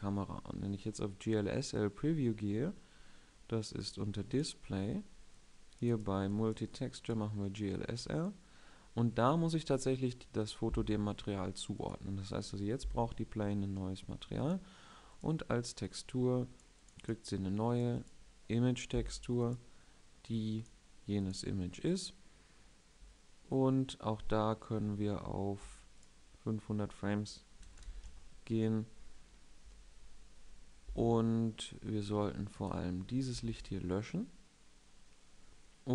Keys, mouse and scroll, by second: 33.0 x.